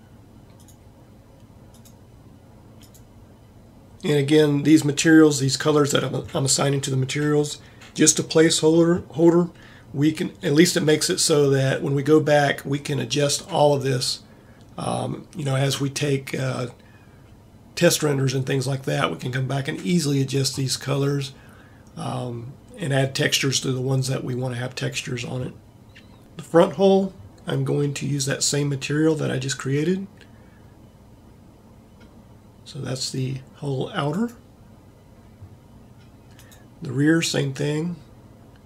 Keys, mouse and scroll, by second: 26.2-27.4 right drag, 36.2-38.2 right drag.